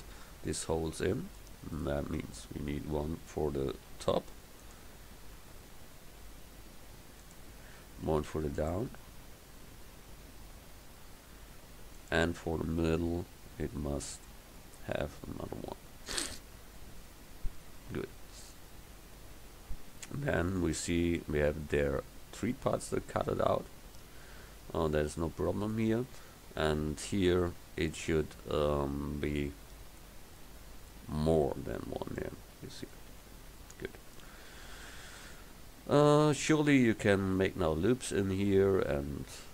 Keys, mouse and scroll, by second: 2.3 Tab, 3.8 ctrl+r, 8.1 ctrl+r, 35.3 KP_1.